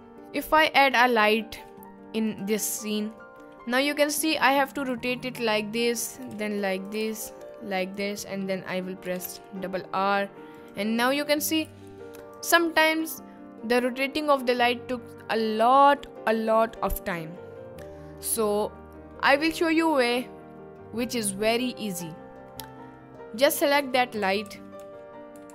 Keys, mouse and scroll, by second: 0.0 shift+a, 1.6 g, 2.3 click, 3.0-3.3 middle drag, 3.8-4.2 middle drag, 6.1 middle click, 6.1 r, 6.3 r, 6.4 z, 6.8 click, 7.2 r, 9.0 r, 9.2 r, 10.6 click, 11.1 middle click, 11.6 s, 12.2 click, 18.3-19.1 middle drag, 22.1-22.6 middle drag, 23.8 click, 24.2 ctrl+z, 24.5 ctrl+z, 24.7 ctrl+z.